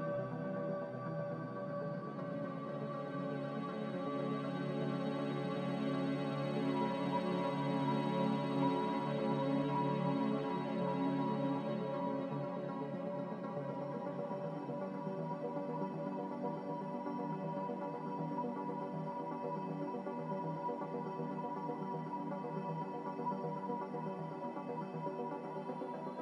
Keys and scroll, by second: 0.8 Return, 7.7 1.